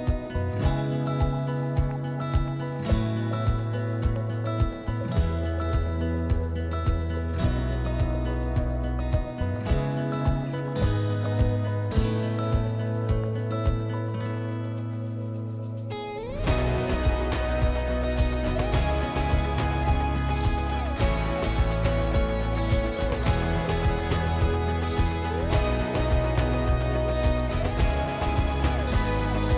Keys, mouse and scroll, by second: 0.3 click, 0.3 typing, 2.9 click, 4.4 click, 7.4 click, 8.1 click, 9.0 ctrl+click, 9.5 click, 10.1 click, 10.9 click, 16.6 click, 19.5 click, 19.5 typing, 21.7 typing, 24.3-25.0 typing, 24.5 click, 27.5 click.